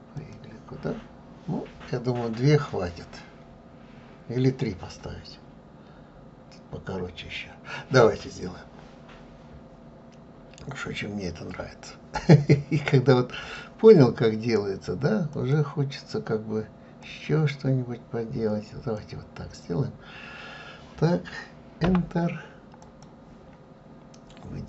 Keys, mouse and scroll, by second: 2.5 click, 8.9-9.7 scroll up 2, 10.2-12.0 scroll down 1, 13.4-16.4 drag, 22.8-24.6 drag.